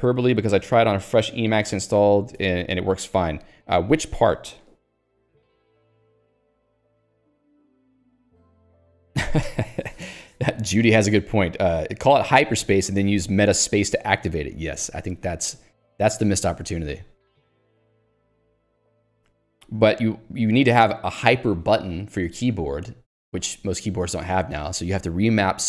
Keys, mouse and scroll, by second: 2.3 Escape.